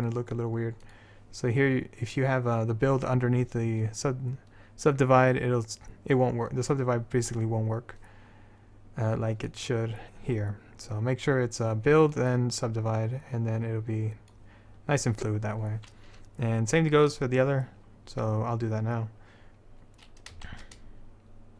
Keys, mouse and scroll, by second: 1.0-3.0 drag, 9.6-14.1 drag, 20.6 shift+a.